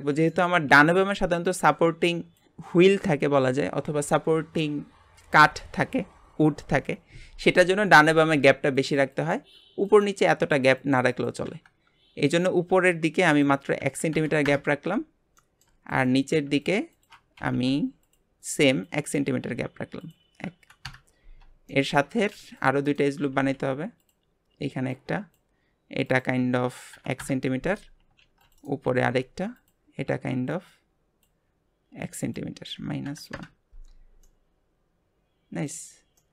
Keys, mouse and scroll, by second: 0.3-11.7 middle drag, 13.3-15.4 drag, 15.4 shift+middle click, 15.9 click, 16.6 alt+shift+click, 16.9 alt+shift+click, 17.4 g, 18.8 click, 20.0-21.7 drag, 21.7 shift+middle click, 22.3 ctrl+r, 23.2 g, 24.9 click, 26.0-28.2 drag, 28.2 ctrl+r, 28.8 g, 30.5 click, 32.2-34.2 drag, 34.2-36.3 middle drag.